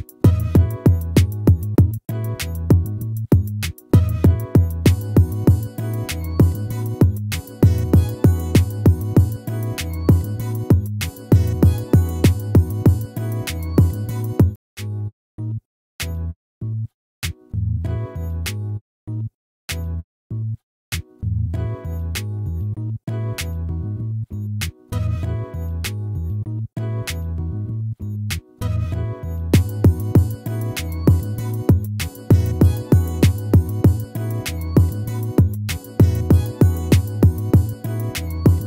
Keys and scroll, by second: 2.6 ctrl++, 5.8 ctrl++.